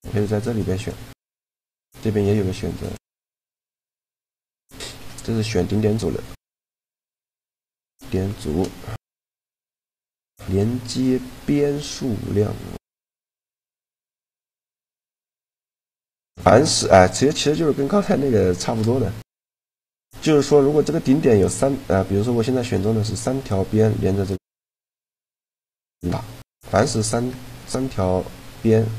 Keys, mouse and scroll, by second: 0.5-2.2 drag, 2.6-5.7 drag, 4.6-5.8 right drag, 5.8-7.2 middle drag, 8.1 shift+g, 12.5 right click, 13.2 shift+g, 16.7-18.1 middle drag, 22.4 right click, 24.5 shift+g, 28.1 click.